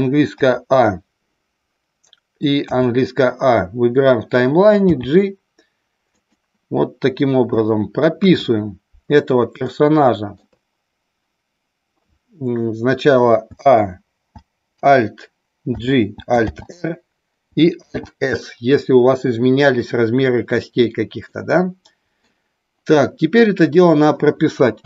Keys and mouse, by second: 0.4 a, 2.6 a, 4.9 g, 6.1 click, 8.1 KP_1, 9.6 shift+middle click, 15.7 alt+g, 16.5 alt+r, 17.7 alt+s, 21.2-22.2 middle drag.